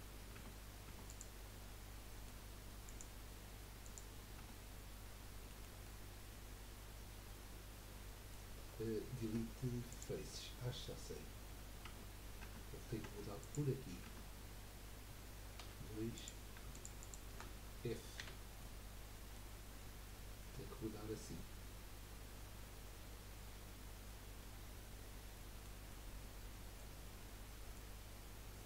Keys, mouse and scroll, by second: 0.3 Tab, 0.8 Tab, 1.0 click, 1.8-2.8 middle drag, 2.8 click, 3.8 click, 4.4 Tab, 5.5-9.2 middle drag, 9.2 Delete, 10.3-11.3 middle drag, 11.3-11.7 scroll up 2, 11.8 Tab, 12.4 Tab, 13.0 Tab, 13.4 click, 14.0 Tab, 15.6 2, 16.1 click, 16.7 alt+shift+click, 18.2 f, 18.6 middle click, 19.4-19.8 scroll down 1, 19.8-22.9 middle drag, 25.9-28.6 middle drag.